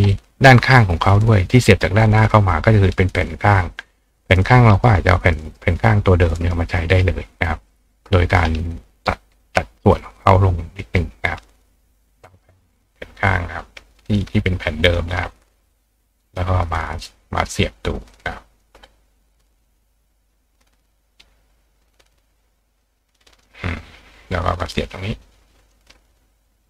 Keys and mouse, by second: 3.2 click, 4.3 click, 4.7 right click, 5.4 right click, 6.4 right click, 7.3 click, 9.3 click, 10.1 click, 10.8-12.4 drag, 12.2-15.3 right drag, 13.1 click, 14.0 ctrl+click, 15.2-15.7 drag, 16.4-17.5 drag, 17.6 click, 18.6 click, 19.6-20.9 drag, 23.4-24.9 drag, 25.7-26.6 ctrl+drag.